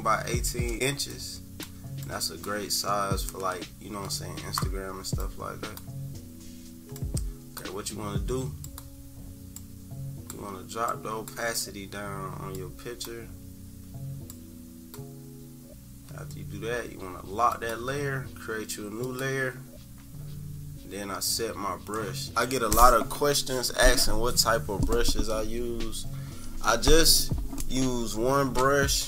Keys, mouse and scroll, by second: 1.1-5.8 drag, 7.0 click, 8.7 click, 9.6 click, 10.9-12.5 drag, 12.7 click, 14.6 click, 19.0 click.